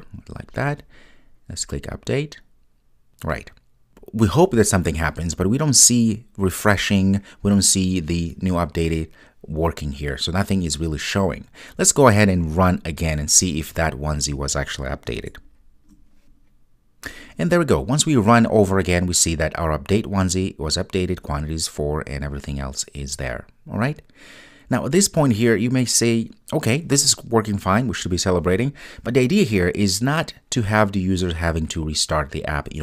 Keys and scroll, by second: 13.4 ctrl+r.